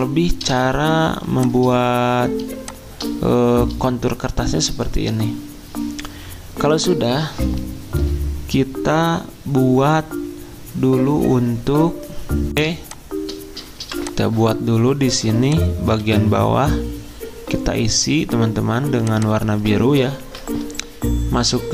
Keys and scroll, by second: 0.0-0.7 typing, 3.2-3.9 typing, 13.8 v, 16.0 ctrl+z, 20.2 ctrl+v.